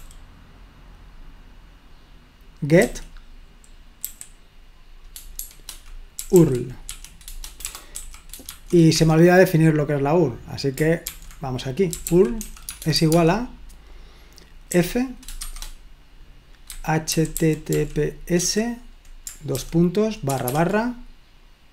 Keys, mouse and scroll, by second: 0.0 typing, 2.8 typing, 4.1 typing, 5.4-8.6 typing, 8.9 Escape, 11.8-13.2 typing, 14.7-18.4 typing, 20.3 typing.